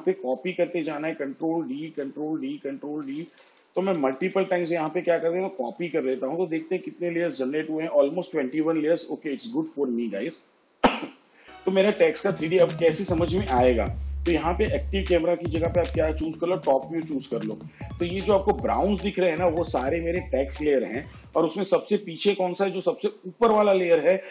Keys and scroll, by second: 1.3 ctrl+d, 2.8 ctrl+d, 3.6 ctrl+d, 4.2 ctrl+d.